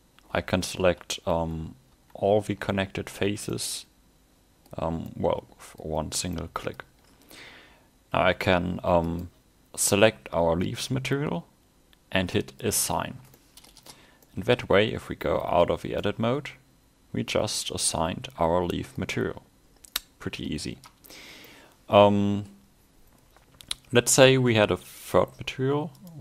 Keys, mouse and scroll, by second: 3.5 middle click, 4.8-5.2 scroll down 4, 5.1 middle click, 6.2 scroll up 2, 6.4 middle click, 6.7 scroll down 1, 9.1 click, 10.0 click, 13.4 middle click, 13.9 Tab, 14.2 middle click, 15.5 a, 15.8 scroll down 1, 16.1 middle click, 19.5 scroll up 1, 20.4 Tab, 21.5 middle click, 25.0 click.